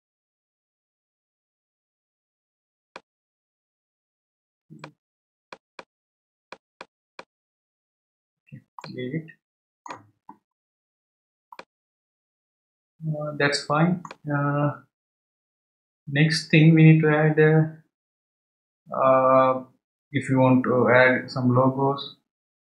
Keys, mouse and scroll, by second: 4.8-7.6 drag, 7.6-8.5 scroll down 7, 8.8-10.6 middle drag, 10.6-11.5 scroll up 3, 11.5-14.7 middle drag.